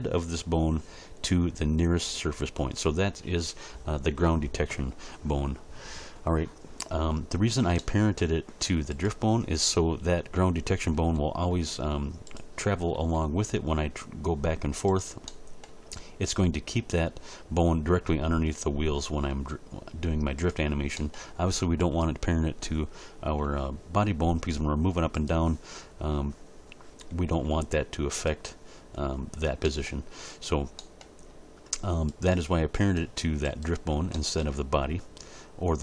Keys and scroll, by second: 10.9 r, 12.9 r, 19.3 r, 23.4 g, 27.3 g.